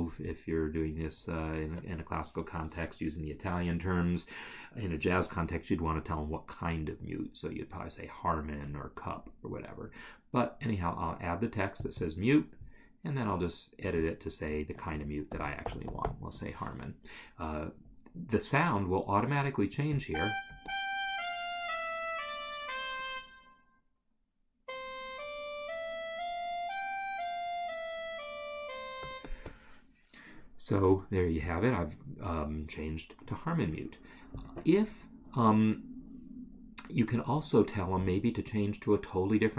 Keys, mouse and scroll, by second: 0.3 click, 11.8 click, 14.1 double click, 14.7 ctrl+a, 15.3 h, 16.5 Escape, 19.9 click, 29.0 space.